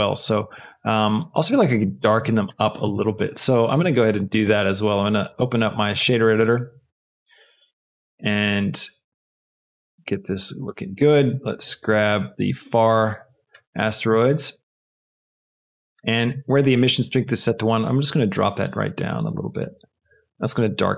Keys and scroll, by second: 2.8 space.